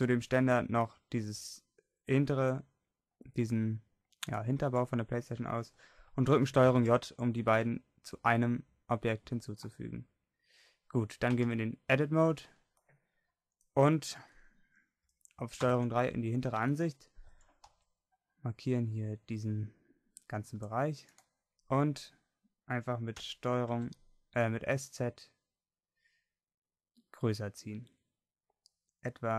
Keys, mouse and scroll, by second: 6.8 ctrl+j, 11.5 Tab, 15.7 ctrl+KP_3, 17.3 a, 17.6 c, 23.2 s.